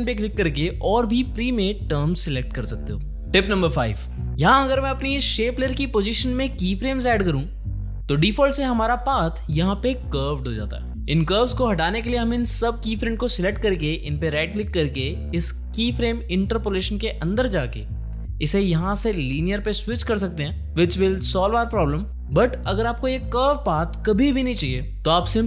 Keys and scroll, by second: 6.3 alt+shift+p, 8.9 space, 19.6 Escape, 23.2 ctrl+z.